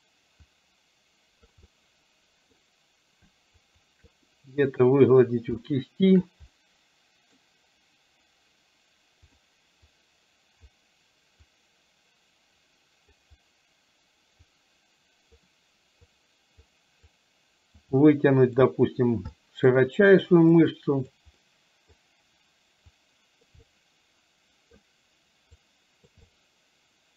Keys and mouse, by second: 0.5-1.6 drag, 1.8 middle click, 3.8 shift+click, 4.4 middle click, 5.6 shift+middle click, 6.6 middle click, 9.3 click, 10.0 click, 11.5-13.3 drag, 14.5-15.5 drag, 16.3 click, 17.1 click, 18.0 middle click, 19.4 middle click, 20.6 click, 21.5 middle click, 23.0 click, 23.8-24.9 middle drag, 25.8 click, 26.3-27.1 middle drag.